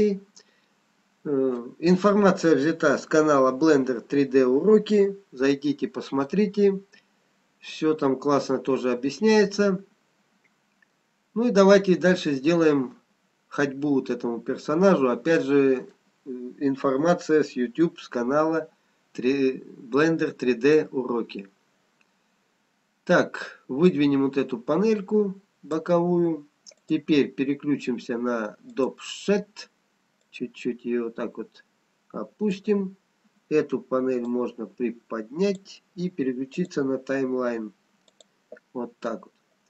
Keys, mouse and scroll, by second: 11.8-13.4 scroll up 2, 13.4 middle click, 13.4-16.0 scroll down 2, 24.0 click, 38.8 click.